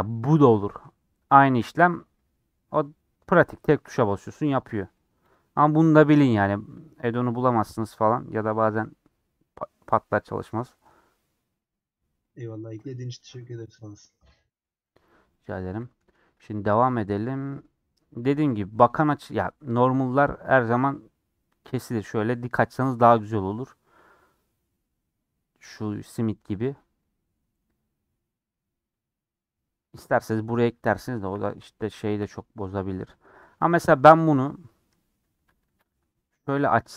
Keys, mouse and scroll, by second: 17.3-31.3 middle drag, 31.3 /, 31.8-33.3 middle drag, 33.3-33.7 scroll up 2, 33.7-35.0 middle drag, 35.0 scroll down 1, 35.1-35.4 scroll up 1, 35.4 Tab, 35.6 shift+d.